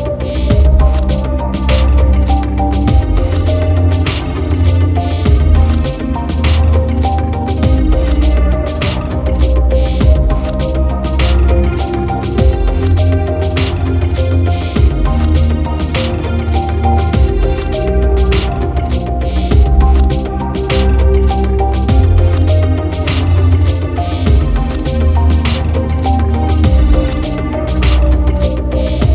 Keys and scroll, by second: 13.8 ctrl+alt+shift+e.